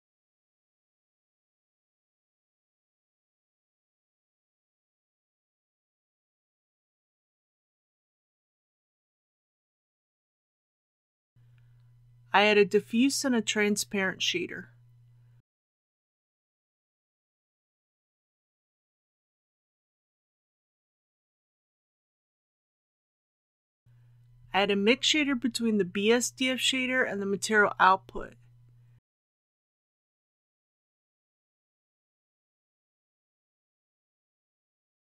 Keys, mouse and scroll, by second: 0.8-2.5 middle drag, 3.8 click, 5.1-6.5 middle drag, 7.4 click, 8.0 KP_Decimal, 8.4 KP_0, 8.6 KP_1, 11.3 click, 13.3 shift+a, 16.2 click, 18.1 shift+a, 21.3 click, 27.5 shift+a, 29.4-35.0 drag.